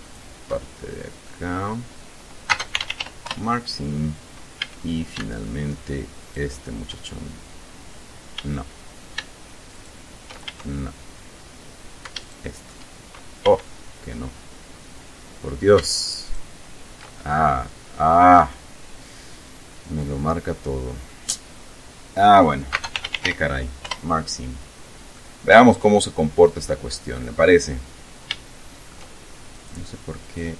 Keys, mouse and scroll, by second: 0.1 alt+shift+right click, 1.4 middle click, 2.6-3.6 typing, 4.8 a, 6.4 alt+shift+right click, 8.5 a, 9.9 alt+shift+right click, 10.6 alt+shift+a, 12.4 alt+shift+right click, 13.6 a, 14.0 scroll up 1, 16.4 alt+shift+right click, 17.4 alt+shift+scroll down 1, 18.1-18.6 scroll down 4, 18.6-22.1 middle drag, 22.8-24.0 typing, 25.3-27.0 middle drag, 27.0-27.4 scroll up 2, 27.8 scroll up 2, 28.4 shift+middle click, 29.6 right click, 30.3 right click.